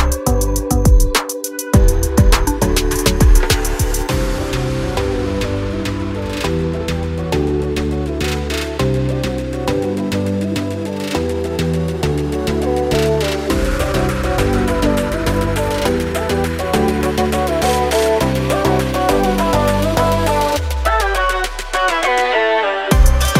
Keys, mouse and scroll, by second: 0.1 click, 2.3 ctrl+click, 3.0 scroll up 1, 5.4 F8, 7.9 2, 9.3 shift+click, 10.4 2, 11.8 scroll down 1, 16.5-16.9 scroll up 1, 17.0 click, 18.4 7, 19.8 click, 20.7 3, 22.9-23.3 scroll down 1.